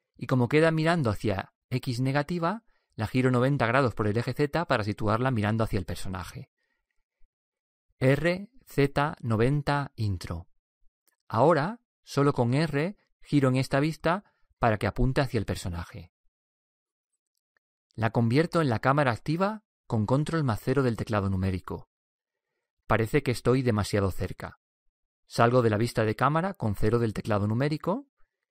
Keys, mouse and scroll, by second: 7.7 r, 20.9 ctrl+KP_0, 27.2 KP_0.